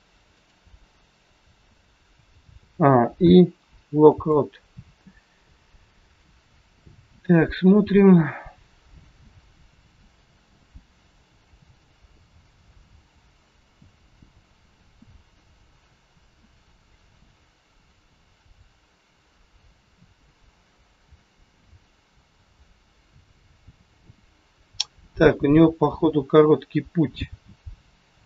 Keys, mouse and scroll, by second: 2.4 a, 3.5 i, 6.2 click.